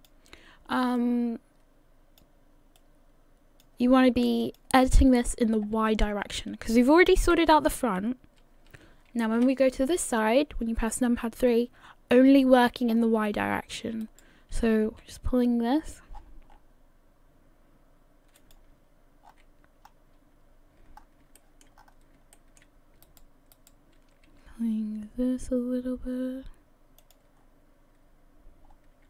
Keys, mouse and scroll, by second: 4.4 click, 5.1-6.2 scroll down 3, 6.2-7.2 scroll down 5, 7.2 KP_1, 9.5 KP_3, 12.9 scroll up 5, 13.5-14.9 scroll up 4, 14.0 right click, 14.9 g, 19.2 scroll down 5, 19.9-21.0 scroll up 1, 21.0 scroll up 3, 21.4 shift+middle click, 21.8-22.2 scroll up 2, 22.4 shift+middle click, 23.0 right click, 24.1 right click, 24.3 g, 27.4-28.4 scroll down 4, 28.4-29.0 scroll down 4.